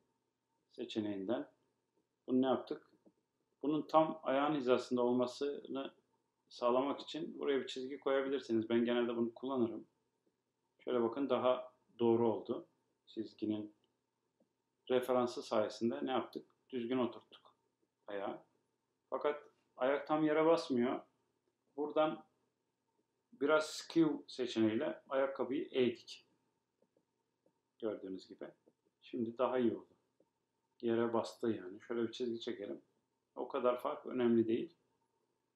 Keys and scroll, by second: 16.6 BackSpace.